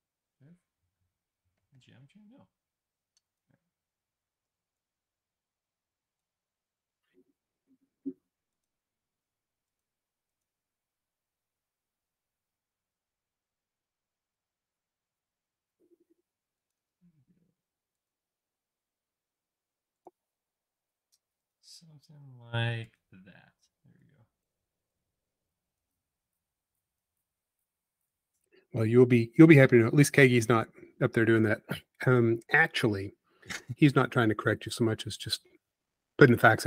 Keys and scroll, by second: 4.5 f, 6.6 l, 17.2 l, 23.3 e, 31.9 space, 33.5 p, 35.8 typing.